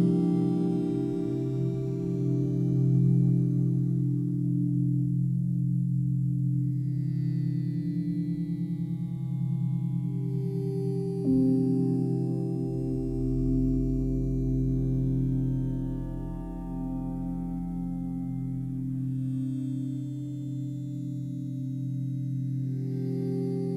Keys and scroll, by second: 5.3-7.0 typing, 6.9 Return.